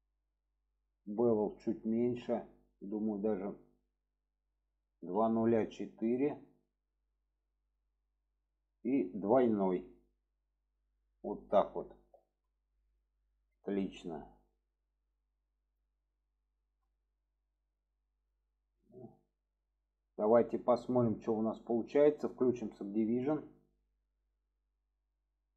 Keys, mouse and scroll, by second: 1.0-7.7 drag, 9.7 click, 11.2 click, 12.1 click, 13.1-13.4 middle drag, 14.1-14.8 middle drag, 16.1-18.8 middle drag, 19.2-20.0 middle drag, 21.6-22.9 drag, 23.4-24.3 middle drag, 24.5-25.5 middle drag.